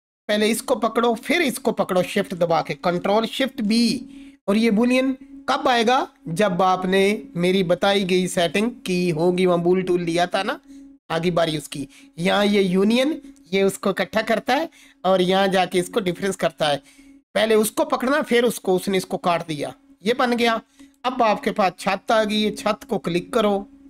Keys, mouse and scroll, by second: 1.2 shift+click, 3.4 ctrl+shift+b, 16.0 click, 19.4-20.3 alt+drag.